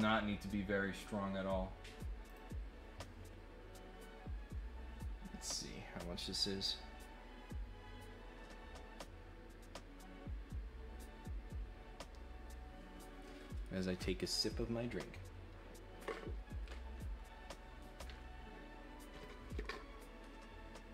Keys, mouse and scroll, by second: 2.2 click.